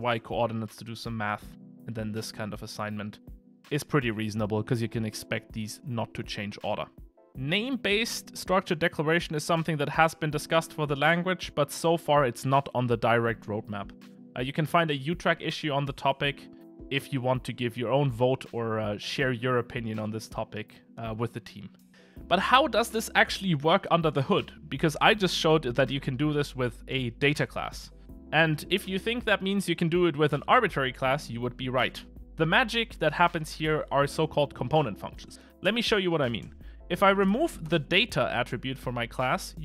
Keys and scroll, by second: 2.5 Escape, 36.7 alt+shift+Right, 37.3 Delete.